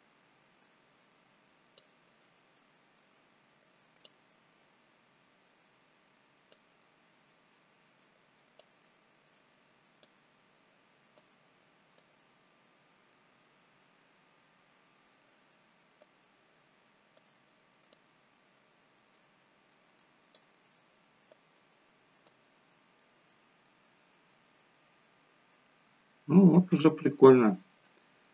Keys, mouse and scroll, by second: 2.0 middle click, 4.6 click, 6.7 middle click, 9.0 click, 11.1 right click, 12.3-13.0 scroll up 2, 13.0 middle click, 13.0 scroll up 2, 16.0 right click, 17.9 click, 21.2 right click, 23.5 middle click, 25.9 shift+middle click, 27.2 scroll down 3.